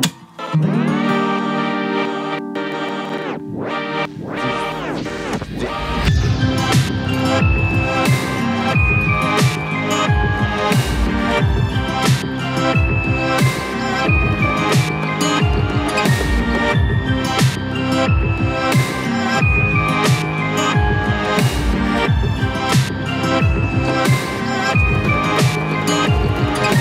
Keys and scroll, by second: 19.6 ctrl+a.